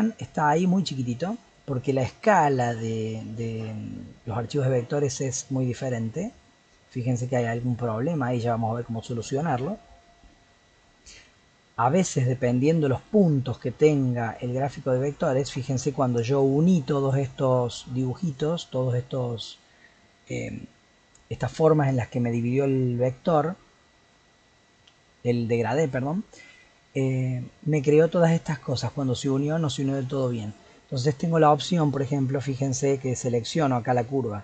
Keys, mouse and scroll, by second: 1.5-3.8 middle drag, 3.8-4.5 scroll up 7, 4.5-5.1 middle drag, 5.1-5.9 scroll up 8, 5.9-8.7 middle drag, 8.7-10.3 scroll down 10, 10.3 scroll up 2, 10.5-10.9 scroll down 2, 10.9-12.6 scroll up 13, 13.6 Tab, 14.9 middle click, 15.3-15.7 scroll up 4, 15.7-19.3 shift+middle drag, 30.1 click, 31.3 l, 33.1 click.